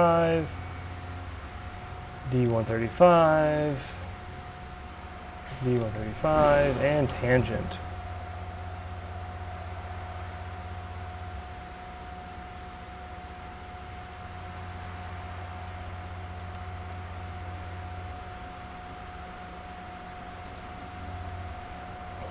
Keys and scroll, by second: 2.1 d, 2.4 3, 2.6 Return, 3.9 d, 5.8 Return.